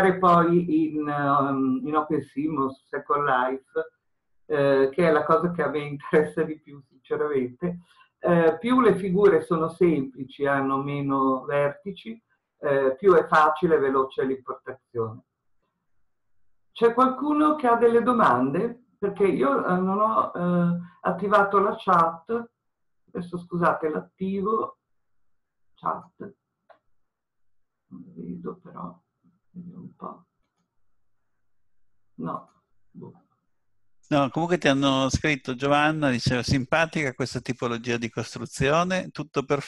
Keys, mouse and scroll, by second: 9.9-14.0 scroll up 1, 32.1 middle click, 32.5 click.